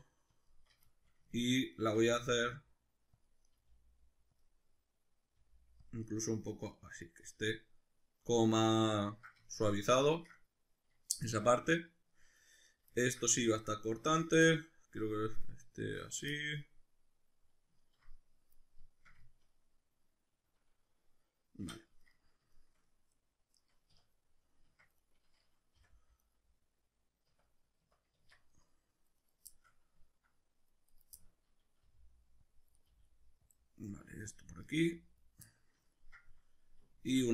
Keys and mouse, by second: 0.5 shift+click, 0.9 shift+middle click, 1.7 right click, 2.0 g, 3.3 click, 3.5 right click, 3.5 g, 4.4 click, 5.4 g, 5.9 click, 6.3 right click, 8.6-12.5 ctrl+middle drag, 12.5 right click, 13.0-25.0 ctrl+middle drag, 21.6 \, 23.9 \, 24.7 Tab, 25.0 right click, 25.8 h, 26.2 right click, 27.3 \, 28.1 Tab, 28.7-29.2 middle drag, 29.2 right click, 29.5-30.9 shift+middle drag, 30.9 right click, 31.1-32.5 middle drag, 31.9 g, 32.5 click, 32.8 right click, 32.9 g, 33.5 click, 33.9 right click, 34.1 g, 34.3 click, 34.7 right click, 34.8 g, 35.2 click, 35.5 middle click, 36.8-37.3 middle drag, 37.1 a.